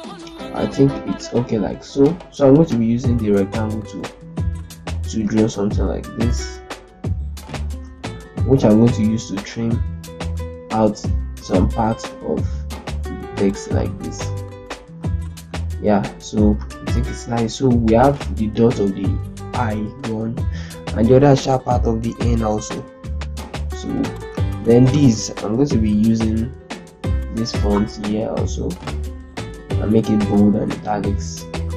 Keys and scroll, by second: 7.4 ctrl+space, 9.9 ctrl+Up, 11.2 ctrl+Down, 15.5 Delete, 16.1 z, 24.3 ctrl+space, 27.5-28.2 typing.